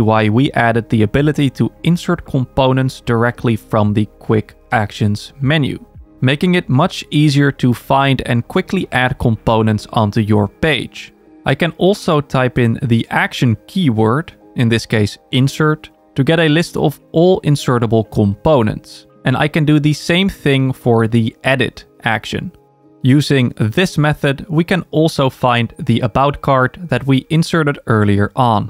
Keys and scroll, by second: 8.1 super+k, 22.7 super+a.